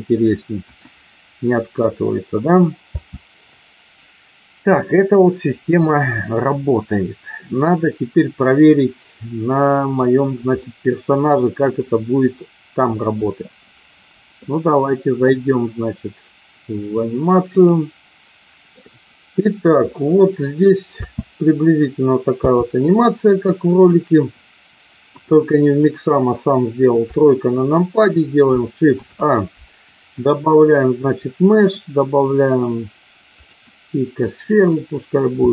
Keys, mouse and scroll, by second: 0.6 KP_1, 2.9 space, 7.4-9.8 middle drag, 10.6 middle click, 11.5 middle click, 17.6-18.7 drag, 18.7 shift+middle click, 21.0 space, 23.9 click, 25.1 KP_1, 27.0 KP_3, 28.9 shift+a, 35.4 s.